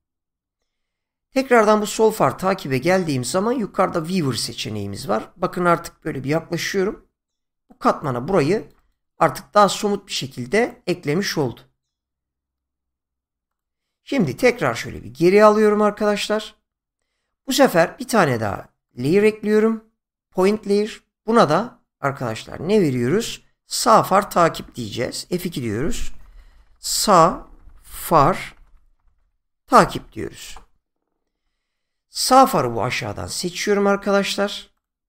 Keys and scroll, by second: 5.9 <, 25.2 F2, 26.2-30.5 typing.